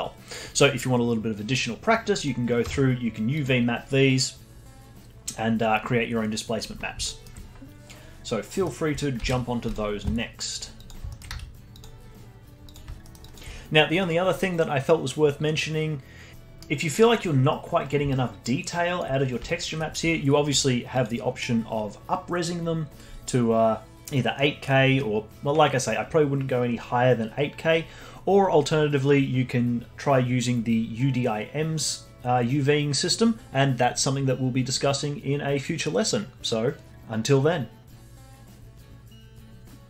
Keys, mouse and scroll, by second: 2.2 click, 2.6 Tab, 6.2-7.0 scroll down 5, 7.0 alt+middle click, 8.5 middle click, 9.2 alt+h, 9.6 click, 10.7 click, 11.1 alt+middle click, 11.2 z, 12.2 click, 12.2-12.6 scroll down 1, 12.6 click, 13.0 alt+middle click, 13.2-16.3 alt+drag, 16.3 middle click, 16.8-17.8 scroll up 12, 17.8 scroll down 1, 18.1-19.2 alt+drag, 19.2 scroll down 5, 19.4 alt+click, 19.7-20.9 alt+middle drag, 20.9 click, 38.1-39.5 scroll down 10.